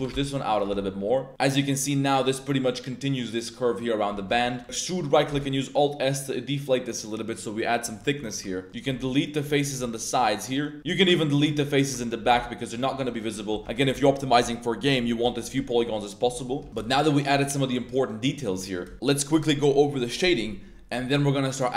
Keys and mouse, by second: 0.1 shift+x, 0.5 shift+click, 0.7 Tab, 0.8-1.5 middle drag, 1.8-2.5 middle drag, 3.7-4.0 drag, 4.1 Tab, 4.4 a, 4.5 click, 4.6 e, 5.3 alt+s, 7.7 shift+drag, 7.9 middle drag, 8.3 shift+middle drag, 8.5 middle click, 8.7 ctrl+click, 8.7-10.9 typing, 9.1-9.4 drag, 10.9 right click, 11.2 drag, 11.7 ctrl+shift+right click, 12.2 z, 12.8 x, 12.9 Tab, 13.0 drag, 13.5 Tab, 13.8 z, 15.2 Tab, 15.4 1, 15.7 drag, 15.8 z, 16.2 Tab, 16.3 drag, 16.6 z, 16.8 shift+drag, 17.0 drag, 17.4 a, 18.2 middle drag.